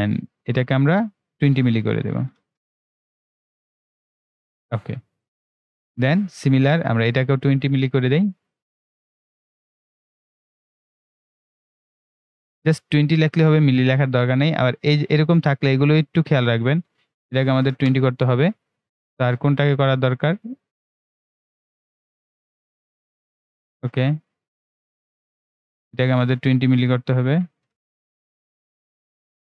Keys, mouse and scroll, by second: 4.7-5.0 ctrl+scroll down 1, 6.6-7.0 ctrl+scroll up 1, 7.0-13.6 drag, 13.6-14.4 ctrl+scroll up 1, 14.8-18.8 drag, 18.8-19.4 ctrl+scroll down 1, 20.0-23.2 ctrl+right drag, 23.2-29.4 drag.